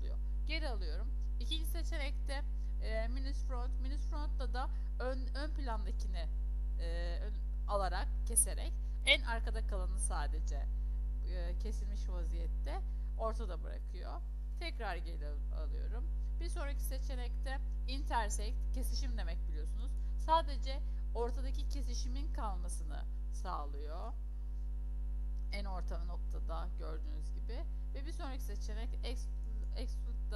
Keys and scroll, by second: 14.4 ctrl+z, 23.7 ctrl+z.